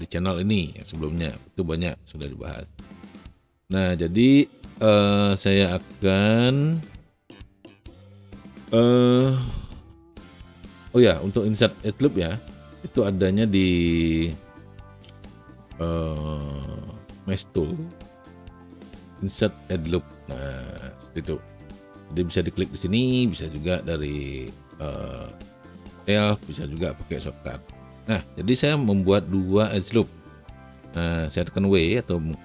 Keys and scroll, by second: 31.8 w.